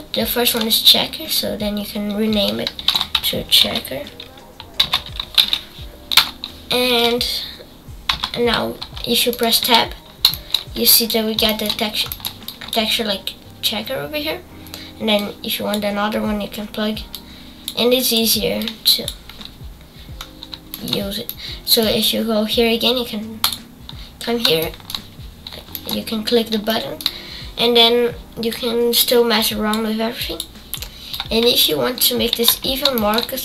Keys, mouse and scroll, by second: 8.1 n, 15.1 click, 17.1 click, 18.6-19.7 drag, 21.2-23.4 middle drag, 23.4-33.4 drag.